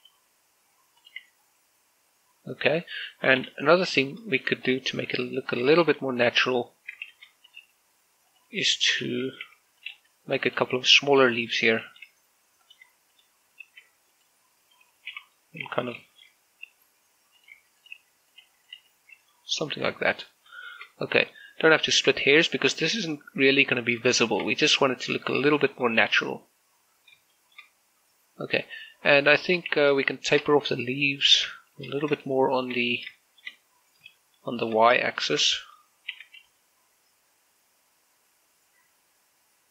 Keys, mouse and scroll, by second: 0.6 g, 1.0 y, 1.8 click, 2.0 Tab, 4.8 z, 5.3 shift+middle click, 6.2 shift+middle click, 7.1 Tab, 7.9 shift+d, 8.3 click, 8.5 r, 9.1 right click, 9.7-14.5 typing, 10.6 click, 11.3 click, 11.9 click, 12.7 click, 13.4 click, 13.9 click, 14.9 click, 15.9 l, 16.1 middle click, 16.5 scroll up 1, 16.9 shift+middle click, 17.5-19.6 typing, 18.2 click, 18.6 click, 19.1 click, 19.5 click, 19.9 Tab, 20.1 middle click, 21.1 scroll down 1, 21.4 shift+middle click, 21.7-22.4 scroll up 1, 22.6 shift+middle click, 24.9 shift+middle click, 26.2 middle click, 26.9 shift+z, 28.1 shift+middle click, 29.5-29.9 scroll down 2, 30.1 shift+middle click, 30.5 z, 30.9 shift+middle click, 31.3-32.0 scroll down 2, 32.0 right click, 32.4 shift+middle click, 32.7 scroll up 1, 33.1 shift+middle click, 33.7 scroll down 1, 33.9 shift+middle click, 35.2 shift+middle click, 35.5 scroll up 2, 35.9 shift+middle click, 36.3-36.9 scroll up 2, 36.9 s, 37.3 y.